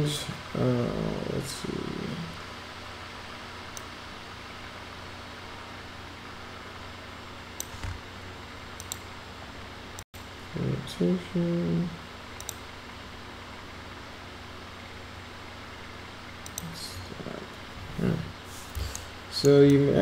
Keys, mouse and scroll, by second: 3.8-7.6 drag, 8.8 click, 16.4 click, 19.0 alt+middle click, 19.7 alt+click.